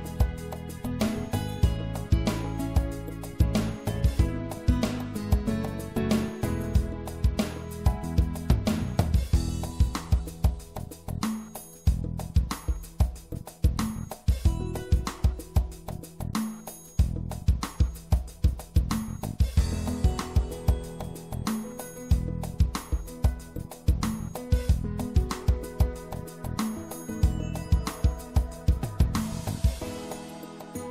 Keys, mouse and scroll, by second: 0.8-2.6 right drag, 2.6-4.6 drag, 6.4-8.2 middle drag, 8.2-10.6 drag, 10.6 middle click, 10.8-12.6 drag, 12.6-13.9 middle drag, 13.9-15.7 drag, 20.7 middle click, 21.5-23.2 drag, 23.2 middle click, 29.9-30.9 middle drag.